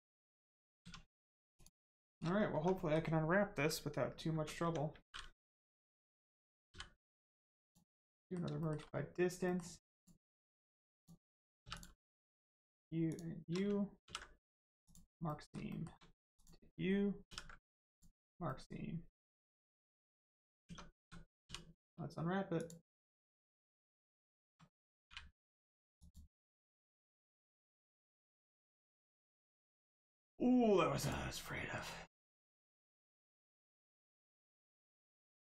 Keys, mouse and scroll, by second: 0.8 1, 1.1 middle click, 1.5 click, 1.9 shift+middle click, 2.3 scroll down 1, 2.5 Tab, 2.7 middle click, 4.3 Tab, 4.6 a, 7.5 click, 8.1 middle click, 8.5 shift+middle click, 8.8 scroll up 1, 9.4 middle click, 9.9 click, 13.1 shift+click, 14.0 ctrl+e, 14.8 click, 15.2 middle click, 15.7 shift+middle click, 16.3 click, 17.2 ctrl+e, 17.9 click, 18.4 middle click, 19.5-19.8 scroll down 1, 19.9 Tab, 21.4 u, 22.5 click, 23.9 middle click, 25.0 u, 25.9 click, 27.8 shift+middle click, 30.9 click, 31.4 middle click, 32.5 shift+middle click, 32.9 middle click, 32.9 middle click, 33.6 scroll up 1, 33.9 middle click, 35.0 click, 35.3 middle click.